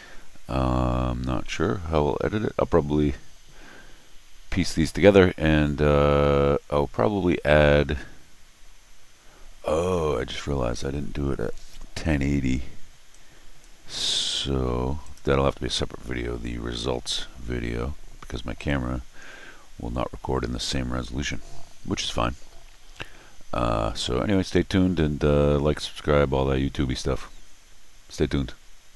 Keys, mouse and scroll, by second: 13.1 click, 15.0 click.